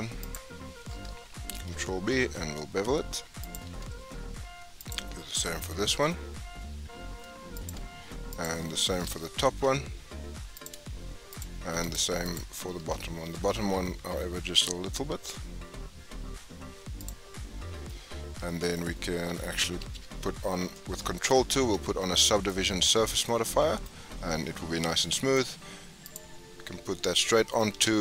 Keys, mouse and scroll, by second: 0.2 alt+click, 1.5 ctrl+b, 4.7 alt+click, 5.9 ctrl+b, 8.3 alt+click, 9.4 ctrl+b, 11.3 alt+click, 11.8 alt+click, 12.2 alt+click, 13.3 ctrl+b, 17.7 Tab, 18.7-19.9 right drag, 19.9 ctrl+2, 20.5 scroll down 2, 20.7-21.4 middle drag, 21.4 scroll down 3, 21.7-22.5 middle drag, 22.5-22.9 scroll up 5, 22.9 scroll down 4, 23.2-24.4 middle drag, 24.4-24.8 scroll up 5, 24.8 scroll down 5, 25.0-26.0 middle drag, 26.0 click, 26.4-26.9 scroll down 6, 26.9-27.7 scroll up 3, 27.7 g.